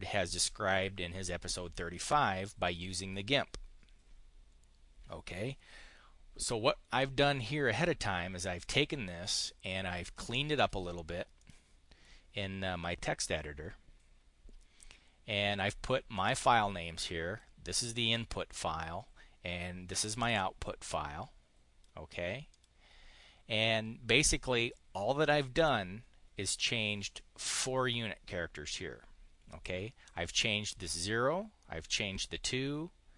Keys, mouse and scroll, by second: 10.1 click, 11.2 click, 16.0-17.3 drag, 19.9-21.8 drag, 22.4 click, 30.1 click, 31.8 click.